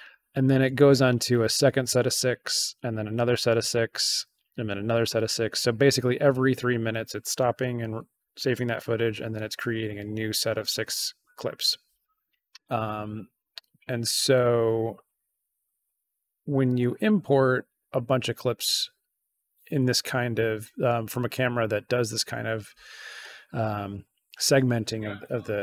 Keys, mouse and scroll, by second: 14.1 click, 16.6 ctrl+a.